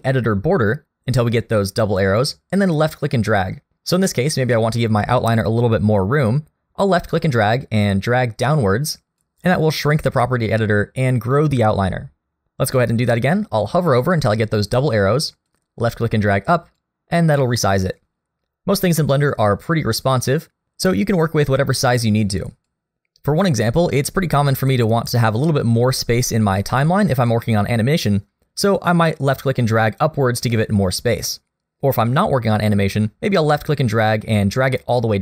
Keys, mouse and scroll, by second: 2.6 click, 15.5 click, 18.9 click, 20.0 click, 27.1 click, 33.4 click.